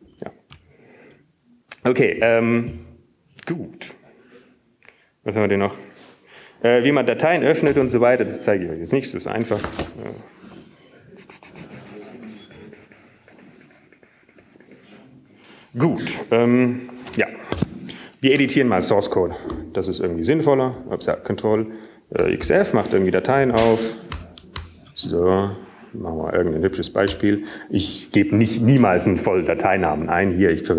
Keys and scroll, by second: 22.4 ctrl+x, 23.4 f, 24.4 ctrl+g, 25.4 ctrl+x, 25.4 ctrl+f, 26.9 Return, 26.9-29.4 typing, 30.6 typing.